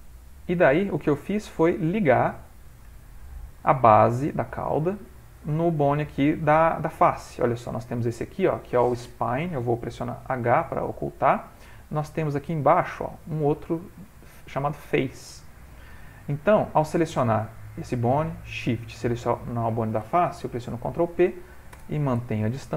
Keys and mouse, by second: 1.3 shift+middle click, 1.6 shift+middle click, 1.9 middle click, 2.5 ctrl+middle click, 3.1 click, 3.6 g, 4.9 ctrl+middle click, 7.1 click, 10.5 h, 11.4 middle click, 11.6 middle click, 12.2 click, 12.7 shift+middle click, 12.9 shift+middle click, 14.7 middle click, 15.4 click, 16.2 middle click, 17.3 click, 18.4 middle click, 19.3 shift+click, 20.7 ctrl+p, 22.6 ctrl+middle click.